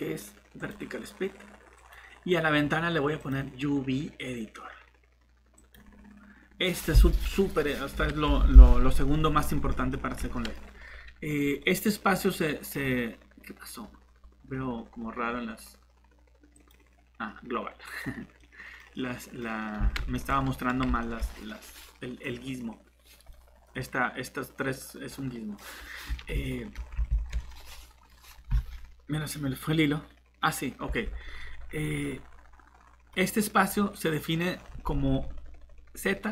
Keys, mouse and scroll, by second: 0.6 click, 1.8 click, 6.5-8.3 scroll up 1, 8.5 middle click, 13.8-14.3 scroll up 1, 14.3-16.3 scroll down 1, 16.6 click, 18.4 middle click, 22.3-23.3 scroll up 1, 23.3 middle click, 23.6 scroll up 1, 25.1 middle click, 25.6 scroll down 1, 26.4 middle click, 27.3 middle click, 28.1 scroll up 1, 31.5-32.0 scroll down 1, 32.0 middle click, 34.5-36.3 scroll up 1.